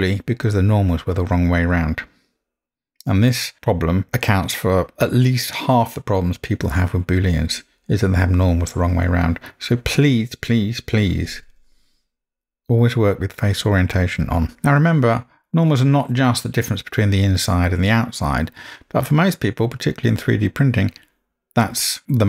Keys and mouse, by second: 11.1-14.5 drag.